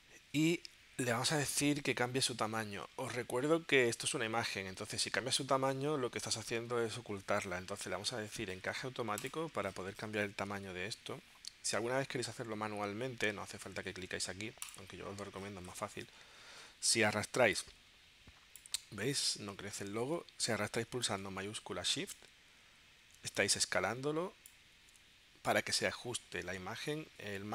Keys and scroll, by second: 7.2 super+z, 20.5 super+z.